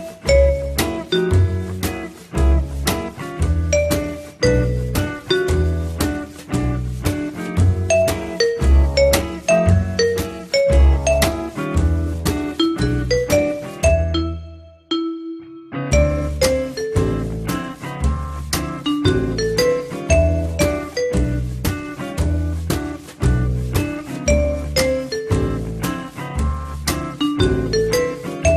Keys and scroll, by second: 15.1 3, 19.7 alt+l, 20.2-21.2 typing.